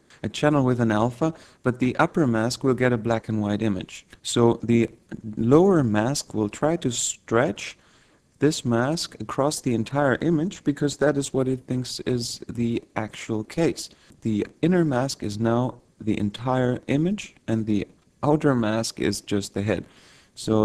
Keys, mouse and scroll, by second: 6.5-8.1 scroll down 2.